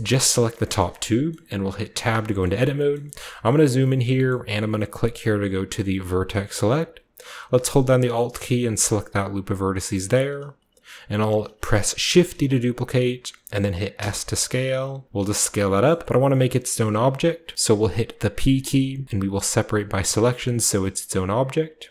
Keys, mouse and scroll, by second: 0.9-6.0 scroll up 1, 1.8 Tab, 2.6 shift+middle click, 3.1 shift+middle click, 3.4 shift+middle click, 3.8 shift+middle click, 4.2 shift+middle click, 6.0 click, 6.7-7.4 scroll up 1, 7.4-8.6 alt+scroll up 1, 8.6 alt+click, 8.6-9.7 alt+right drag, 12.0 shift+d, 13.9 s, 15.2 click, 15.8 middle click, 16.2 typing, 16.4-18.2 middle drag, 18.2 typing, 19.9-21.4 drag.